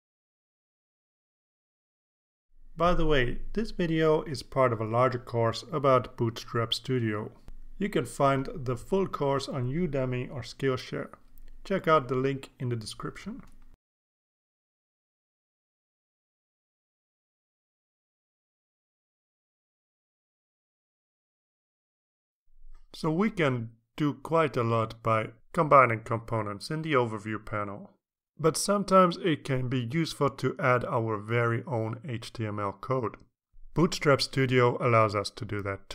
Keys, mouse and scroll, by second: 2.6 click, 3.0-4.1 typing, 11.6 click, 13.3 click, 14.2 click, 15.8 click, 16.6-18.1 drag, 18.8-19.9 scroll down 2, 20.8-21.8 scroll up 2, 21.8 scroll up 1.